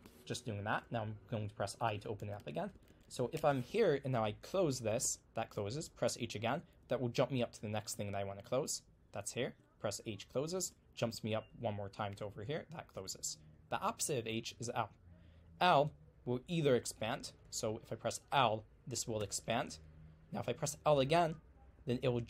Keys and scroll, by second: 1.6-3.9 typing, 5.1 h, 9.5 h, 14.4 l, 17.1-17.5 typing, 19.2 l.